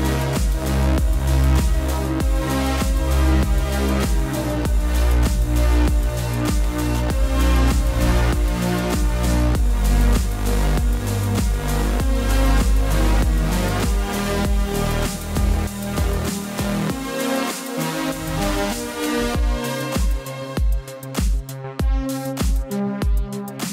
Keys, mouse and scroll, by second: 8.3 click, 10.6 typing, 16.0 click, 17.3 l, 18.4 v, 18.6 click, 20.6 right click, 20.9 click, 21.2 ctrl+t, 22.6 click.